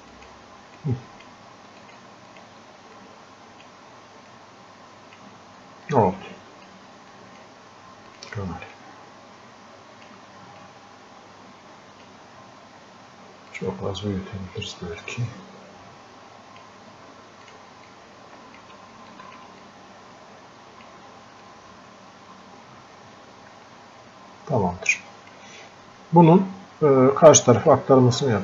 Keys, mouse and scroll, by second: 3.0-4.3 drag, 3.3 typing, 4.3-5.9 drag, 5.9-10.7 drag, 10.7-19.1 drag, 20.0 click, 21.8-25.5 drag, 27.7-28.4 drag.